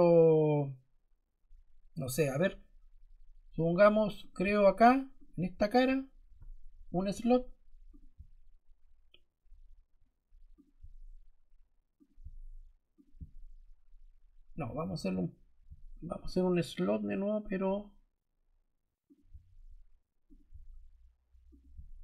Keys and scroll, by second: 14.8 Escape.